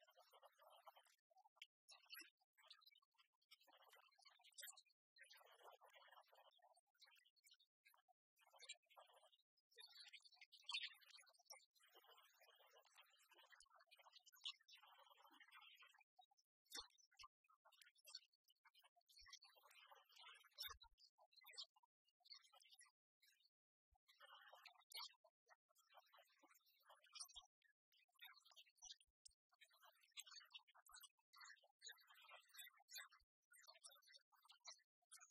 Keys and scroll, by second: 11.3 Return.